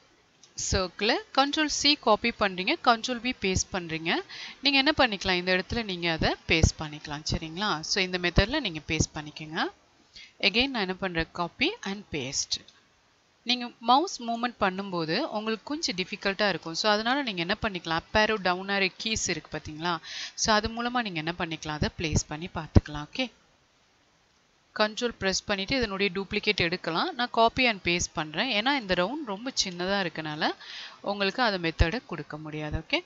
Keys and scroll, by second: 1.4 ctrl+c, 11.1 ctrl+c, 11.6 ctrl+v, 27.0 ctrl+c, 27.3 ctrl+v, 28.5 Down.